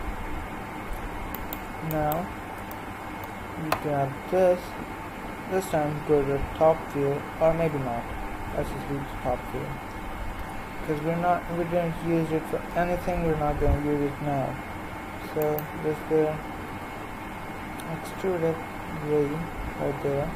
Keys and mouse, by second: 1.3-5.2 right drag, 5.2 KP_7, 7.6 KP_3, 10.3 e, 16.7 e.